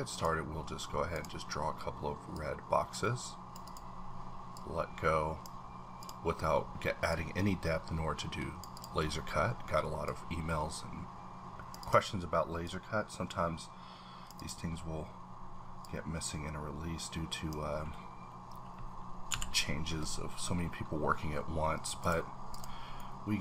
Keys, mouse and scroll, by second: 1.6-2.3 scroll up 2, 2.3-3.6 drag, 3.6 double click, 4.5-7.1 drag, 7.1-8.7 drag, 8.7 double click, 10.0-11.8 drag, 11.8 double click, 12.6-14.4 drag, 14.4 double click, 15.8-20.8 drag, 19.3 v, 20.8-21.7 scroll up 2, 22.0 click, 22.5 click, 23.0-23.4 middle drag.